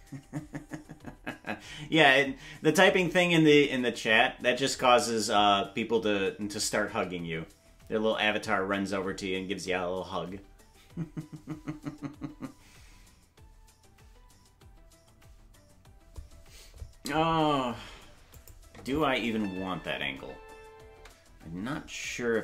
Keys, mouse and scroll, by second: 18.3 click, 18.7 space, 21.6 space.